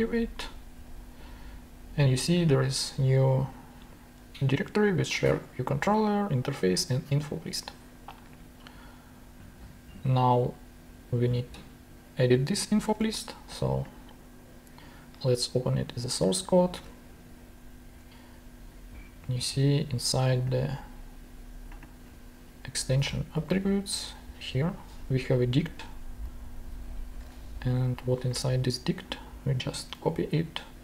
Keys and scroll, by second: 7.7 super+Tab, 12.9 super+Tab, 16.7 super+Tab, 22.8 super+c, 22.9 super+Tab, 23.3 super+f, 23.5 super+v, 26.8 Return, 27.2 super+Tab.